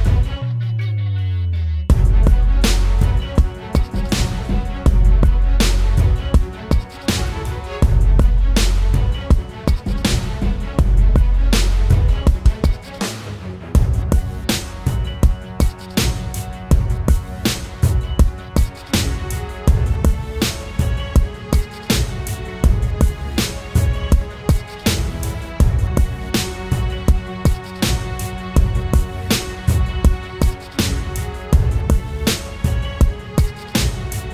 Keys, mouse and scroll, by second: 0.5-1.3 typing, 8.4 alt+click, 9.8 typing, 15.8 typing, 31.4 alt+click.